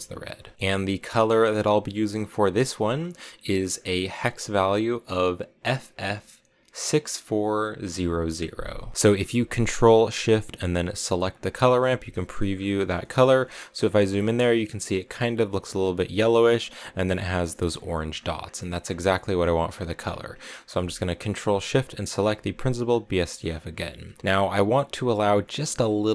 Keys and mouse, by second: 2.4 click, 3.5 click, 11.0 ctrl+shift+click, 12.0 shift+click, 12.9 shift+middle click, 19.4 shift+middle click, 20.4 middle click, 21.9 ctrl+shift+click, 22.7 click, 23.2 middle click, 25.4 middle click.